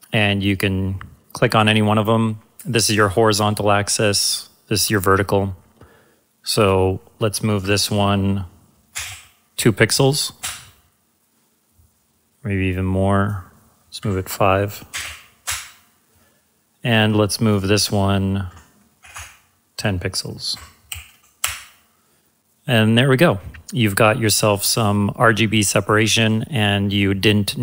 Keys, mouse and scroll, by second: 6.6 click, 7.6 Right, 9.0 2, 10.4 Return, 13.2 click, 14.0 Right, 15.0 typing, 15.4 Return, 17.4 click, 18.5 Right, 20.5-20.9 typing, 21.4 Return, 24.7 click.